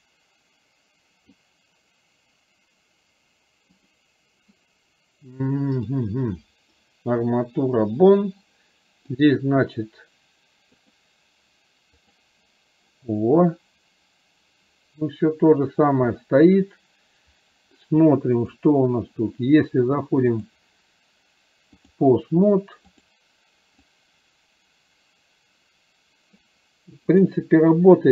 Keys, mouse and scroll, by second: 4.0 click, 5.9 click, 10.9-12.4 drag, 18.5 click, 20.4-22.1 drag, 24.0-26.5 drag, 27.1 click.